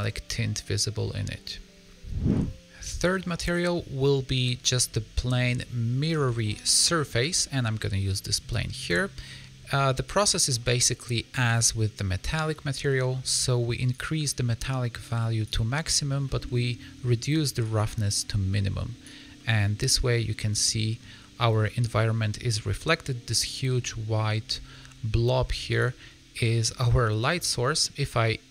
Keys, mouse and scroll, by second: 3.4 click, 4.3 middle click, 9.8 click, 10.0 click, 13.9 click, 16.2 middle click, 17.6 click, 19.3 middle click, 21.6 middle click, 24.4 scroll down 3, 24.6 middle click, 25.6 click, 26.4 middle click.